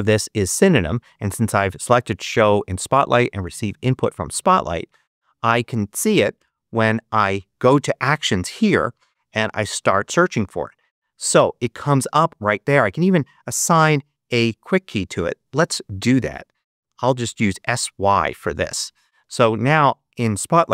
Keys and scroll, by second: 4.9 super+h, 6.3 super+space, 7.6 super+3, 9.4 s, 9.8 y, 16.2 s, 16.8 y, 18.0 Return, 19.2 Escape.